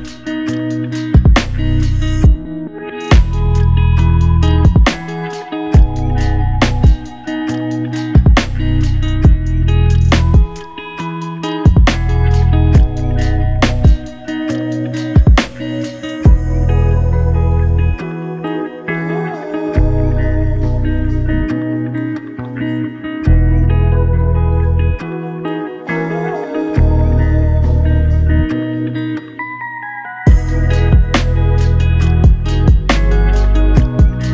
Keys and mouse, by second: 0.3 w, 0.5 ctrl+click, 2.9 ctrl+click, 5.1 ctrl+click, 8.7 alt+click, 13.3 alt+click, 21.5 ctrl+click, 24.3 alt+click, 28.9 q, 30.3 alt+click, 32.2 alt+click, 33.6-33.9 typing.